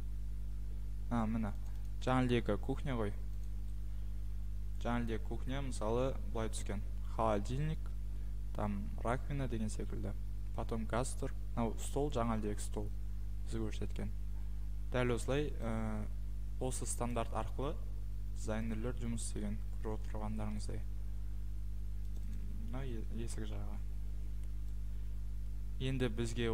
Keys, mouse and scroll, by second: 1.8 click, 3.4 click, 6.6 click, 17.1 click, 18.8 click.